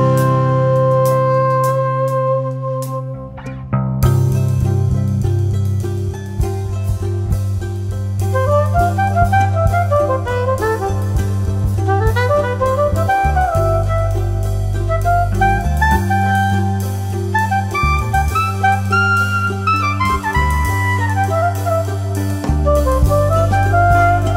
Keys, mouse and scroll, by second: 2.4 F2, 2.6-4.6 drag, 4.6 ctrl+z, 4.9 ctrl+click, 6.0 shift+Page_Up, 7.5-11.1 drag, 11.1 F3, 11.7 F2, 11.9 click, 13.4 F2, 13.4-16.8 drag, 16.8 F2, 17.0 click, 18.1 shift+Page_Up, 19.5-22.1 drag, 22.1 right click, 23.1 F12.